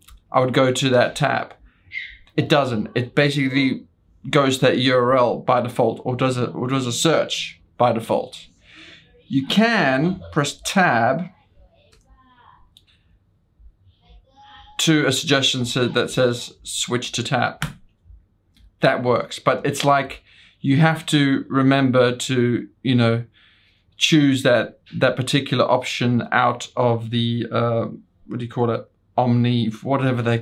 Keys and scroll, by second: 11.8 Tab, 15.4 Tab, 18.7 Return.